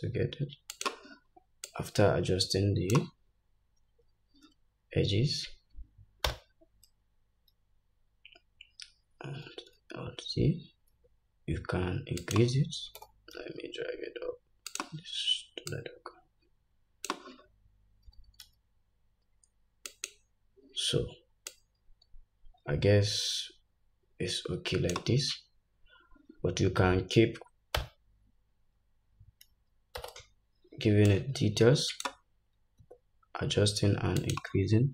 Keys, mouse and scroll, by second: 1.8-12.4 drag, 6.3 Tab, 9.6 alt+z, 11.0 s, 13.1 g, 15.8-20.1 drag, 18.1 g, 21.6-34.4 drag, 27.8 Tab, 30.1 alt+z, 32.8 s.